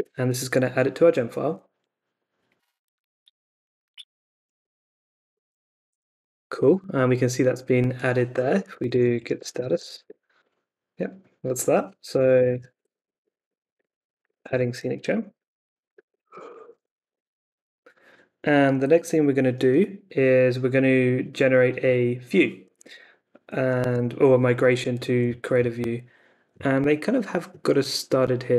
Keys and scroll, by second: 4.9-6.2 typing, 8.6-10.4 typing, 11.9-17.3 typing, 22.8 super+Tab.